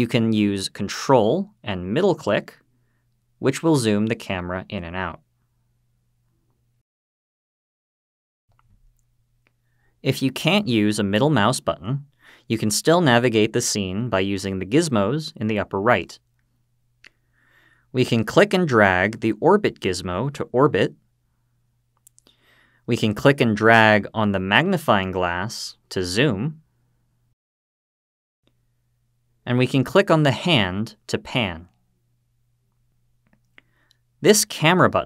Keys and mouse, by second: 2.9-7.5 ctrl+middle drag, 18.2-22.0 drag, 24.9-27.5 drag, 30.5-33.6 drag.